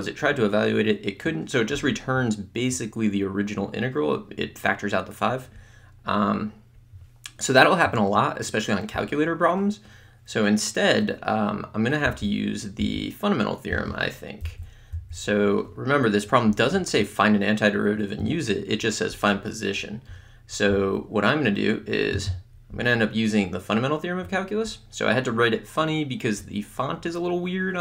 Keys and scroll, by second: 12.1 Delete.